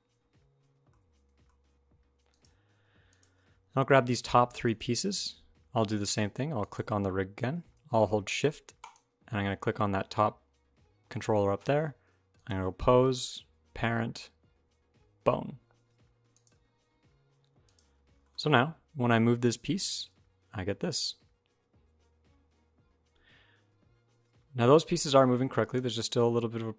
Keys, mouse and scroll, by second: 0.1-0.5 scroll down 4, 0.7 shift+middle click, 1.3-2.1 scroll up 1, 2.1 click, 2.1 scroll up 2, 2.9 click, 3.9 shift+click, 4.4 shift+click, 7.5 shift+click, 8.6 shift+click, 12.2 click, 17.4 click, 17.8 scroll down 2, 18.0 shift+middle click, 19.6 middle click, 19.6 g, 26.1-26.7 shift+scroll up 4.